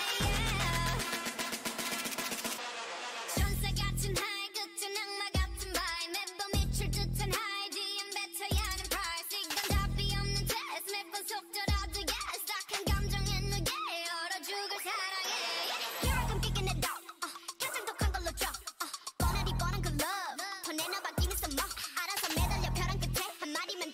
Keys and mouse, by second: 0.3 x, 1.6 z, 3.8 click, 4.0 x, 4.6-6.0 middle drag, 6.9 ctrl+r, 7.5 g, 9.7 z, 10.1 c, 11.1 z, 11.4 g, 12.9 z, 13.3 middle click, 13.8 Tab, 15.0 Tab, 18.0 alt+m, 19.1 z, 19.8 click, 20.5 alt+m, 21.7 z.